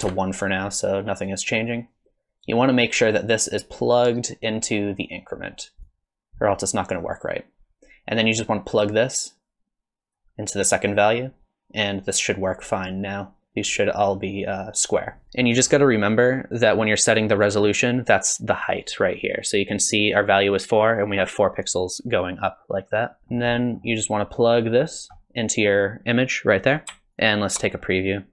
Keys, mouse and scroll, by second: 1.3 click, 5.8 click, 8.4 click, 15.2 middle click, 15.5 middle click, 23.2 middle click, 23.2 scroll down 5, 23.5 middle click, 27.2 ctrl+shift+click, 27.8 middle click.